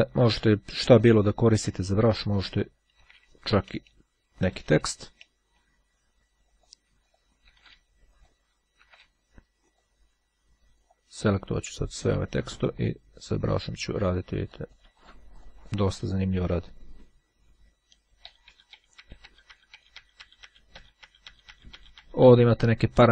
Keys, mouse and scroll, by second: 1.9 click, 3.1 d, 4.6-7.0 drag, 7.9 g, 8.2 click, 9.7 click, 11.0 click, 12.9-16.7 drag, 17.9 ctrl+z.